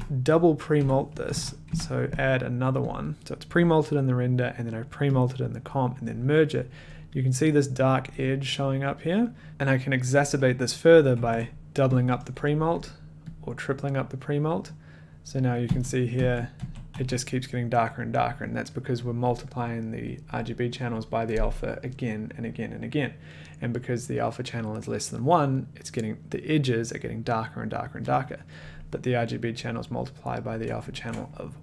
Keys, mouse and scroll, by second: 0.5-2.1 typing, 2.9 click, 5.4 click, 6.6 scroll, 8.2 scroll, 9.5 ctrl+c, 9.5 click, 11.1 ctrl+v, 12.4 click, 12.9 click, 13.5 click, 14.1 click, 14.9 click, 15.7 d, 16.1 d, 16.5 d, 16.9 d, 29.8 click, 30.9 ctrl+click.